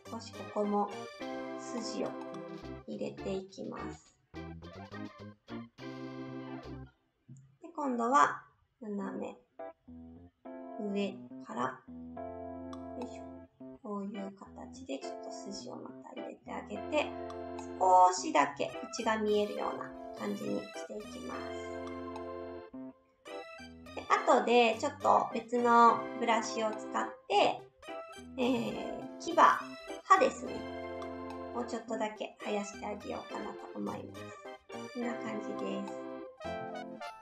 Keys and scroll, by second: 28.5 s.